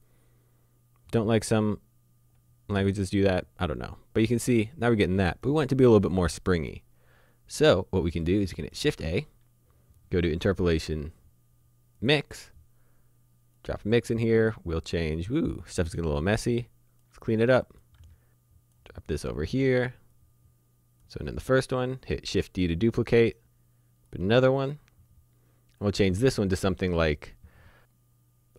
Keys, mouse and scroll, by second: 0.1 click, 8.8 shift+a, 12.0 click, 13.6 click, 16.3 click, 18.0 click, 20.1 click, 22.3 shift+d, 23.2 click.